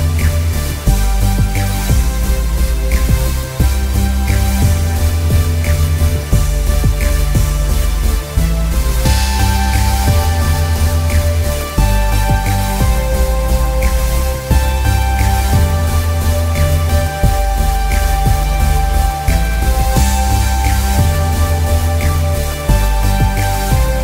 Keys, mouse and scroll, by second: 0.4-0.8 scroll up 1, 0.8 click, 2.7 space, 2.8 ctrl+z, 3.1 click, 4.6 click, 6.6 alt+scroll down 1, 6.8 click, 8.2 click, 9.1 click, 10.3 ctrl+z, 10.4 alt+scroll up 2, 10.6 space, 10.9 click, 12.2 alt+scroll down 1, 12.3 click, 12.4 space, 12.6 click, 13.3-13.8 alt+scroll down 2, 13.9 click, 15.3 click, 15.6-16.0 scroll down 1, 16.0 click, 16.1 alt+scroll up 1, 17.0 click, 18.1 click, 19.6 space, 19.9 click, 22.4 click.